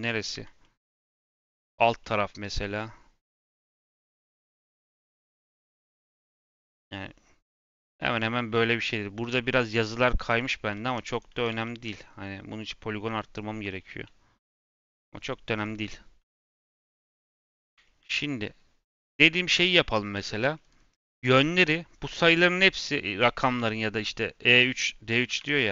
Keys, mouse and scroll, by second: 0.3 KP_Decimal, 0.5 middle click, 0.8 scroll down 2, 1.2 middle click, 1.5-1.9 scroll up 5, 1.9 scroll down 1, 1.9-5.1 middle drag, 5.1 scroll up 2, 5.4-8.0 middle drag, 8.0-8.6 scroll up 2, 8.8-10.5 middle drag, 10.5 ctrl+r, 11.4 ctrl+z, 11.9 scroll down 1, 12.2-14.6 middle drag, 14.6 Tab, 15.1 scroll down 2, 15.5 click, 16.5 click, 16.9-17.2 scroll down 4, 17.2-17.6 middle drag, 17.6-18.3 scroll up 3, 17.8 middle drag, 18.4-20.0 middle drag, 20.0 scroll down 1, 20.1-20.9 middle drag, 20.9 click, 25.3 Tab, 25.6 a.